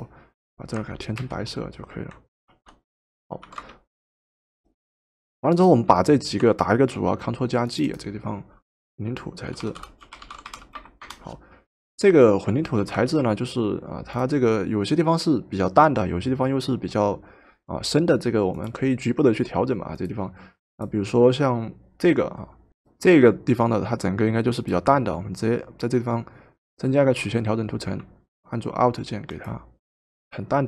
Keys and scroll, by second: 1.3 alt+Delete, 2.5 ctrl+d, 3.5 v, 6.9 ctrl+g, 9.2-11.0 typing, 12.8 v.